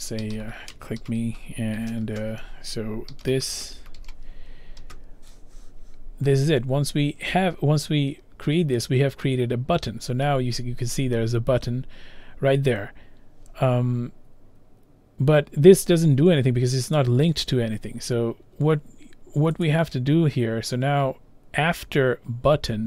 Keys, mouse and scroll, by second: 0.0-4.8 typing, 8.9 click, 8.9-9.7 typing, 17.0 click, 19.6 click.